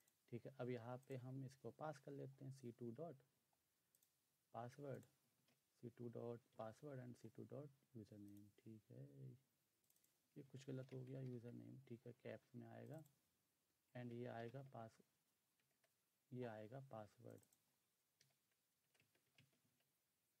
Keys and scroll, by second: 2.2-2.9 typing, 5.2 typing, 6.6 typing, 10.9-11.6 typing, 14.4-15.7 typing, 18.3-19.7 typing.